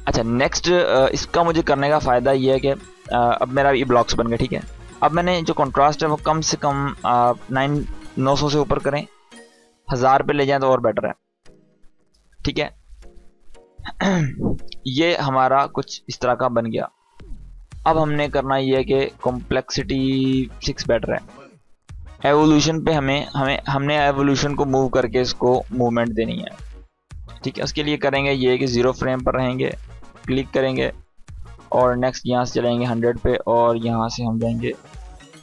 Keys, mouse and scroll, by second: 2.5 click, 5.1 click, 9.4 click, 14.5-15.4 drag, 19.4 click, 23.4-25.6 drag, 28.3-32.6 drag.